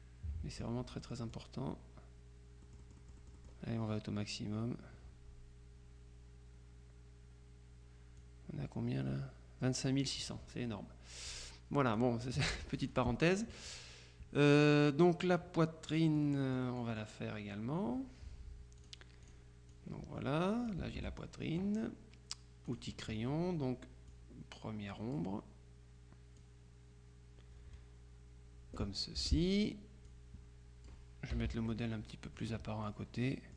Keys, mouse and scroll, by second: 0.6 click, 1.3 click, 2.7-4.0 drag, 8.2-10.6 drag, 11.4-12.6 drag, 12.8 click, 16.2-17.6 drag, 18.9-19.9 drag, 21.0 ctrl+z, 22.8 click, 24.2-25.7 drag, 26.5-29.4 drag, 29.3 F2, 30.2-31.4 drag, 31.4 KP_Subtract, 32.4-33.4 drag.